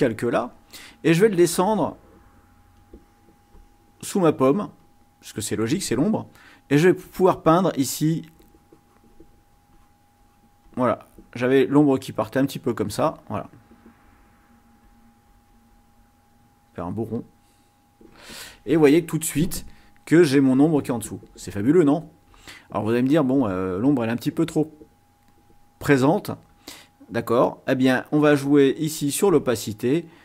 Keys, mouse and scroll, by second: 2.8-5.1 drag, 7.6-9.4 drag, 9.8 click, 10.2 click, 11.2 click, 13.0 click, 14.0 click, 14.8-16.4 drag, 16.7 click, 26.5-30.2 drag.